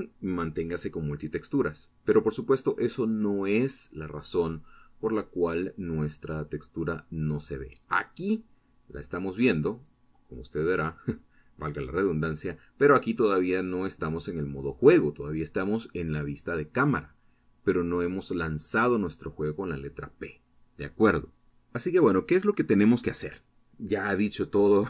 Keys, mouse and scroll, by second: 0.0 click, 0.2 click, 0.8 click, 2.1 click, 4.5 click, 6.6 p, 9.1 scroll down 2, 9.9 scroll up 2, 14.3 click, 15.3 click, 15.8 click, 16.7 click, 18.2 shift+middle click, 23.0-23.4 scroll down 2.